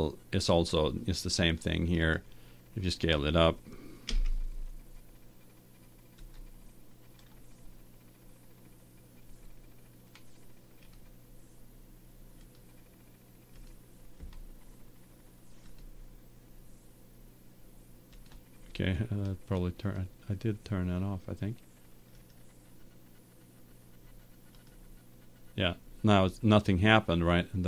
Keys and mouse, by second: 2.0-3.8 right drag, 4.1 s, 6.4-8.3 drag, 8.3-10.1 middle drag, 10.8 middle click, 11.0-12.2 drag, 13.0-17.2 drag, 17.3 click, 18.2-21.8 drag, 22.3-24.2 right drag, 24.7-26.4 drag.